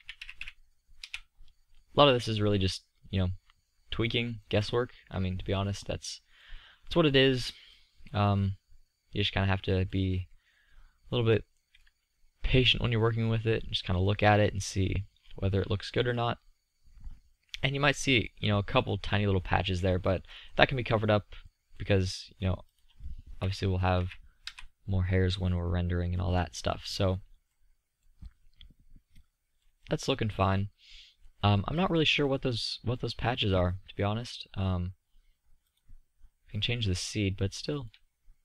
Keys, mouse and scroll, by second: 1.1-3.1 middle drag, 3.6 middle click, 6.0-7.4 middle drag, 7.6 middle drag, 10.1-11.2 middle drag, 15.8-17.4 middle drag, 19.1-20.6 middle drag, 22.2-24.6 drag, 24.6 middle click, 29.9-34.3 middle drag.